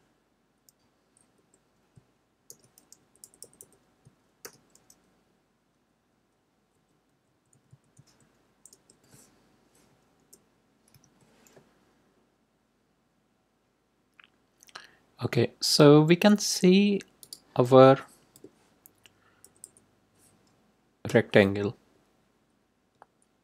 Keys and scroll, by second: 0.6 Up, 1.3 Left, 2.4 shift+", 3.0 Left, 4.4 shift+', 5.7 Down, 7.1 Right, 9.8 Left, 10.1 Left, 10.9 5, 18.3 BackSpace, 19.4 Left, 21.0 BackSpace, 22.9 Up.